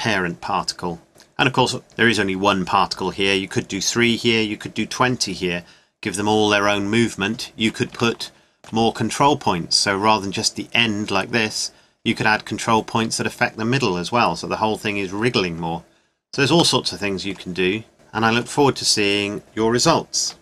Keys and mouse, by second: 0.9 middle click, 2.0-3.9 drag, 6.6-8.3 middle drag, 11.3 middle click, 15.7 middle click, 16.3-18.0 drag.